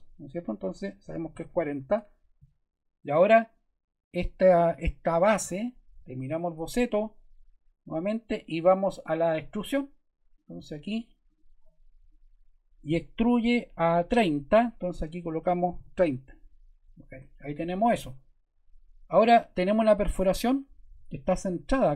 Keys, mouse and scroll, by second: 0.8-1.8 typing, 1.9 Return, 11.2 click, 15.3-16.2 typing, 17.2 Return.